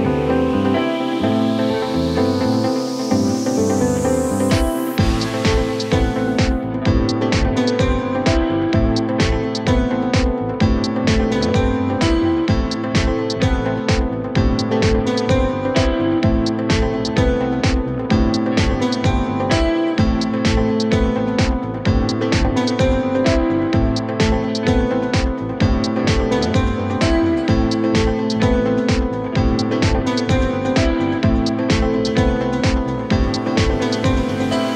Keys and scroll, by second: 2.1 shift+F2, 7.7 F3, 8.3 Escape, 8.9 Delete, 11.3 shift+F2, 11.7 Escape, 18.2-20.5 typing, 21.1 ctrl+z.